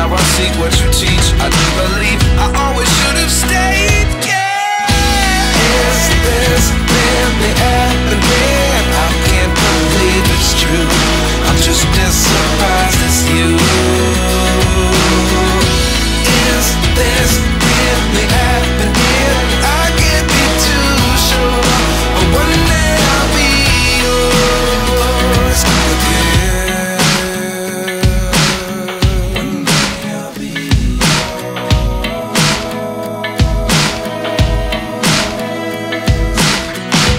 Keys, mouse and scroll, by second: 0.1 shift+a, 3.6-6.3 drag, 6.3-7.7 right drag, 7.7 KP_7, 8.0-8.5 scroll down 5, 8.5 g, 10.5 scroll up 5, 10.6-11.3 scroll down 1, 11.3 KP_0, 11.9 g, 13.1 shift+d, 13.2 g, 13.7 s, 13.8 g, 15.0 ctrl+s, 15.0 ctrl+s, 15.1 shift+d, 15.5 g, 16.6 click, 16.7 scroll up 6, 16.8 shift+middle click, 16.9 shift+middle click, 17.1-20.6 typing, 17.7 scroll down 5, 18.7 middle click, 19.9 ctrl+s, 20.8 ctrl+s, 21.2 ctrl+s, 21.3 shift+middle click, 21.5 ctrl+s, 21.5 click, 21.8 ctrl+s, 22.4 shift+a, 25.2 r, 27.5 KP_7, 27.7-28.1 scroll down 2, 28.1 g, 29.3 KP_0, 29.8 g, 31.4 click, 31.5 s, 32.6 ctrl+s, 33.6 s, 34.4 ctrl+s, 34.5-35.0 scroll up 5, 35.0-35.3 scroll down 3, 35.3 ctrl+s, 35.5 click, 36.4 click.